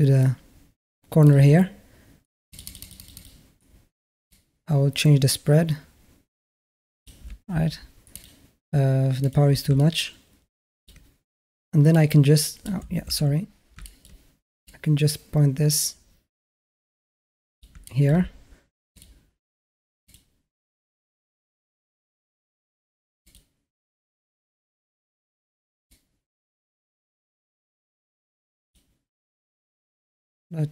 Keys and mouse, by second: 2.3 click, 2.5 click, 2.7 click, 2.8 click, 3.0 click, 4.1-6.9 drag, 7.9 click, 9.1 click, 9.6-10.7 alt+middle drag, 11.8 click, 12.9 ctrl+z, 13.6 alt+middle drag, 14.5-17.4 drag, 17.7 click, 17.7 alt+middle drag, 19.9 click, 23.0 click, 25.8-28.6 drag.